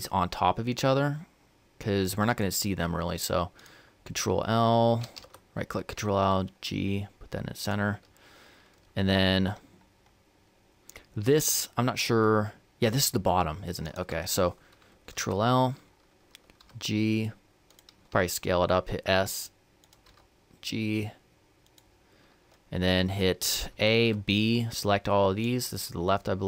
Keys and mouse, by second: 3.4-6.0 right drag, 4.9 ctrl+l, 6.0 g, 13.6-16.4 right drag, 14.9 ctrl+l, 16.4 g, 17.9 s, 19.9 g, 23.5 a.